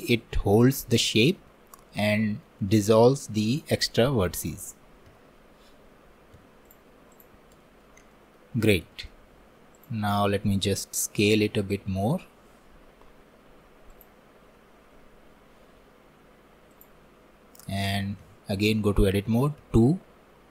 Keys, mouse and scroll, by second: 5.1 1, 6.4 Tab, 7.1 click, 8.1-9.8 alt+middle drag, 9.8 click, 11.3 s, 15.8 s, 18.3 Tab.